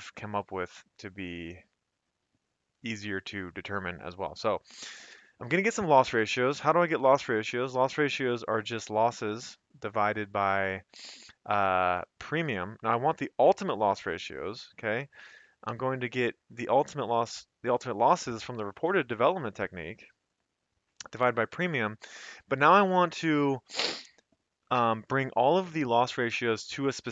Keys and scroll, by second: 7.8 =, 15.7 /.